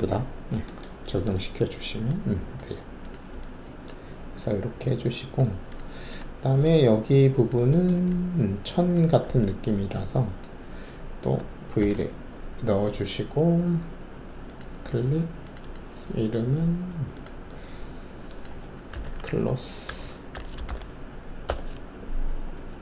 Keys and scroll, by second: 11.8 alt+shift+v, 18.9-20.6 typing, 21.4 Return.